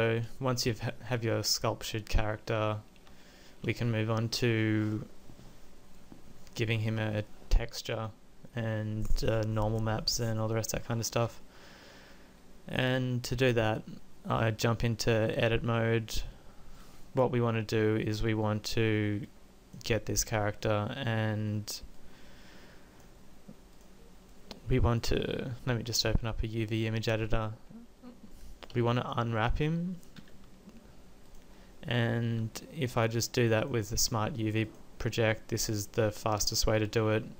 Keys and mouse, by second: 11.4 Tab, 28.8 a, 29.0 a, 30.3 u, 33.1 u.